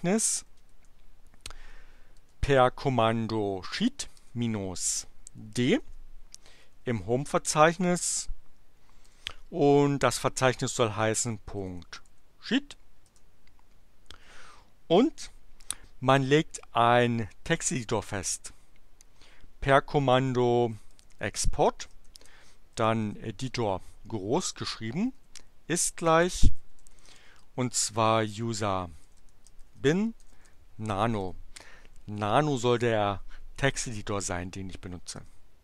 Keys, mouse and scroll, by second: 0.0-1.1 typing, 2.1 space, 3.8-5.8 typing, 8.0 shift+7, 9.0 ., 11.1-12.5 typing, 13.0 Return, 19.8-23.0 typing, 25.1-31.2 typing, 35.1 Return.